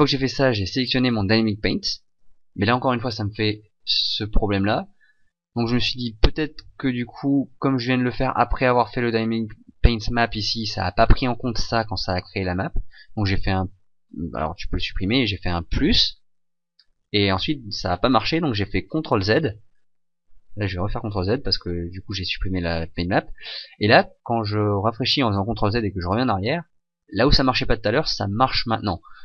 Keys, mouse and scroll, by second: 26.5 ctrl+z.